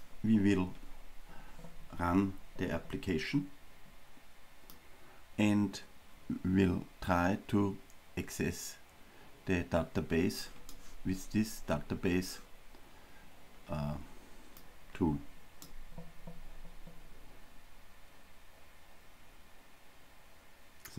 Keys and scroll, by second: 15.7 ctrl+r.